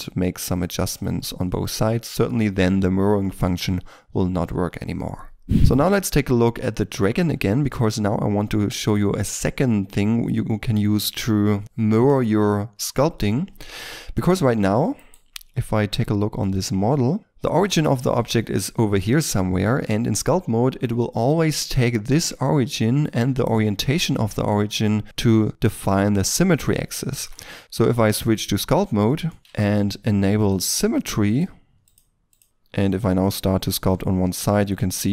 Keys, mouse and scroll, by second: 5.6 n, 13.7 middle click, 14.9 right click, 15.6 scroll up 1, 16.3-19.0 scroll up 1, 19.3 middle click, 26.6-27.0 scroll up 1, 27.0 middle click, 27.4 Tab, 29.0 middle click, 29.4 shift+middle click, 32.2 double click, 32.4 ctrl+z, 33.0 middle click.